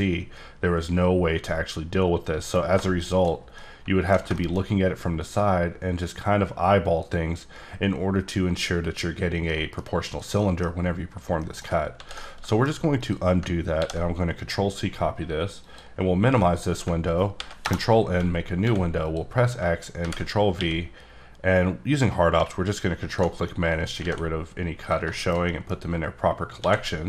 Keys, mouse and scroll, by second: 3.5 scroll down 1, 3.6 middle click, 4.6 scroll up 2, 5.3 click, 9.3 scroll down 3, 9.5 middle click, 10.1 click, 10.4 middle click, 11.4 middle click, 12.0 ctrl+z, 12.5 shift+middle click, 13.0 click, 13.8 ctrl+c, 15.6 click, 16.4 middle click, 16.7 scroll up 1, 17.3 ctrl+n, 17.6 Return, 18.3 scroll up 3, 18.6 x, 19.0 click, 20.0 ctrl+v, 20.5 q, 22.9 ctrl+q, 23.1 ctrl+Num_Lock, 23.1 ctrl+click, 23.5 middle click, 24.0 alt+a, 24.4 scroll up 4, 24.8 click, 25.1 shift+middle click, 26.6 d.